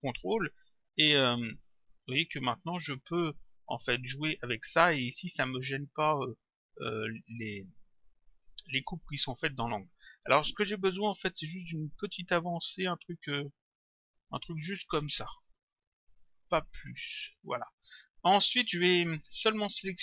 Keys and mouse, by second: 1.5 click, 12.9 click, 16.1 click, 19.3 click.